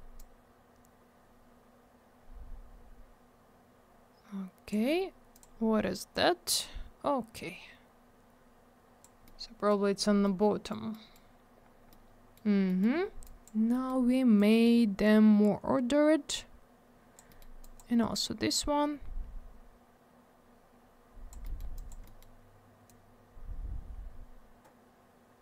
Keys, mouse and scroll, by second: 0.1 click, 5.3 click, 5.3 click, 6.1 click, 9.2 middle click, 9.8 scroll down 1, 10.2 middle click, 10.9 middle click, 11.3 scroll up 1, 11.9 middle click, 12.6 middle click, 12.8 middle click, 12.9 scroll up 1, 13.2 click, 13.7 middle click, 13.8 middle click, 14.3 click, 17.2 middle click, 17.3 middle click, 17.6 click, 17.7 double click, 18.5 click, 21.4 middle click, 21.5 middle click, 21.7 click, 21.8 double click, 22.0 middle click, 22.1 middle click, 22.8 click.